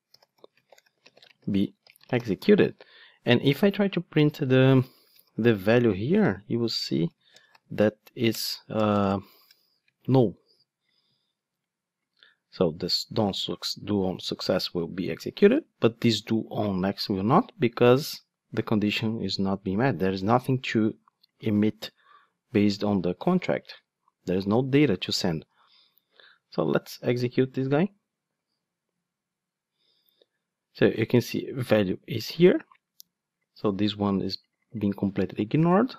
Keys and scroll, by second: 8.3 Return, 21.4 super+b, 25.5 ctrl+Tab, 27.5 ctrl+d.